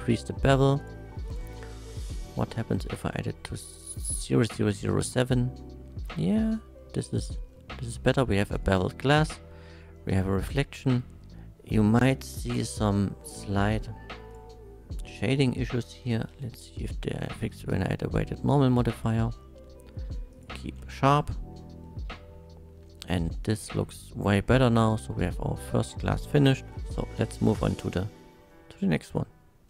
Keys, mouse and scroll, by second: 0.8 click, 1.3 click, 2.3 KP_0, 2.9 KP_7, 5.1 Return, 6.1 middle click, 6.8 middle click, 7.5 middle click, 8.8 shift+middle click, 10.3 shift+middle click, 11.3 middle click, 12.2 middle click, 14.3 click, 15.2 click, 15.8 w, 15.9 e, 16.3 i, 17.5 click, 18.8 middle click, 20.3 click, 21.0 shift+middle click, 21.8 shift+middle click, 22.9-24.1 shift+middle drag, 25.0 middle click, 25.7 middle click, 26.2 scroll up 1, 26.4 middle click, 26.9-27.3 scroll down 1, 27.3 middle click, 28.5 middle click.